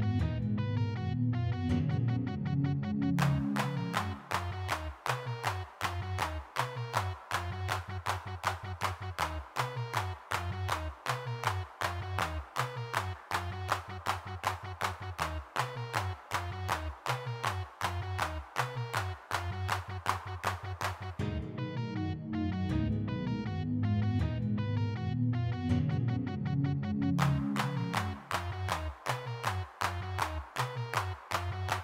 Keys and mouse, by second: 0.7-2.5 middle drag, 3.8 f, 4.2 g, 6.2-8.3 middle drag, 8.3 3, 8.4 f, 8.8 click, 9.3 click, 10.3-11.5 drag, 11.5 ctrl+z, 12.0-17.6 middle drag, 18.9 middle click, 23.9 middle click, 25.4 click, 25.7 middle click, 26.4 g, 26.4 f, 26.6-28.2 drag, 28.2 middle click, 28.7 f, 29.1 4, 29.2 middle click, 29.8 click, 30.2 ctrl+z, 30.3 3.